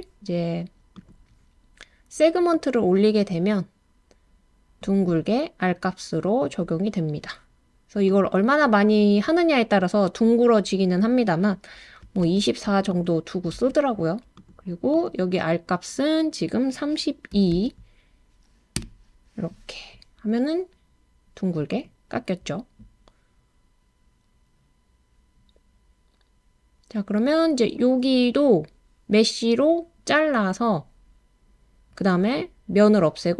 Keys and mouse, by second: 1.0 click, 2.5-7.2 drag, 8.1-9.4 drag, 12.0 2, 12.2 4, 13.0-14.4 drag, 14.9-18.9 drag, 21.7 click.